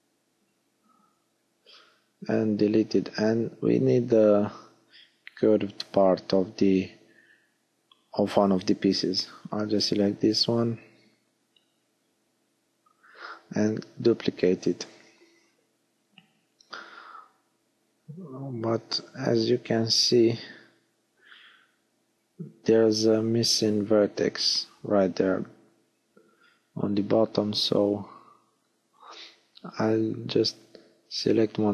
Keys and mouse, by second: 1.9 click, 2.4 middle click, 2.6 middle click, 2.9 middle click, 4.1 middle click, 4.9 g, 6.2 click, 7.0 g, 7.4 click, 9.7 middle click, 11.3 shift+d, 15.9-17.0 middle drag, 18.6 ctrl+KP_1, 22.2-23.4 middle drag, 25.8 click.